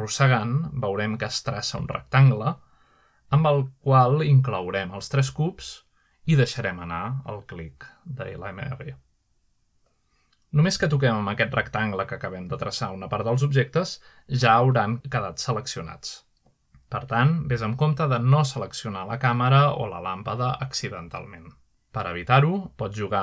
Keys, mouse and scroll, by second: 0.0-6.0 drag, 18.4-19.2 middle drag, 18.6-19.6 scroll down 2, 21.5-22.0 middle drag.